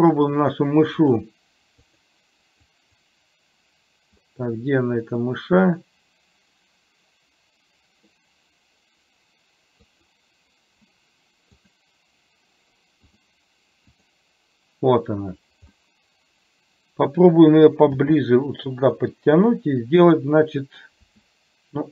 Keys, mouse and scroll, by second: 0.2 click, 1.0 click, 1.8 click, 2.8 click, 5.3-8.3 middle drag, 11.6 click, 13.2 click, 14.0 click, 16.0-17.2 middle drag, 18.0 g, 21.1 s.